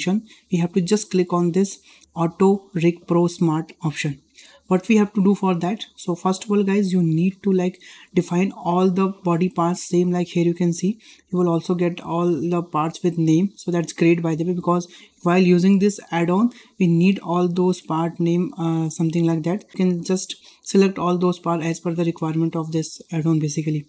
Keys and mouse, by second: 1.6 click.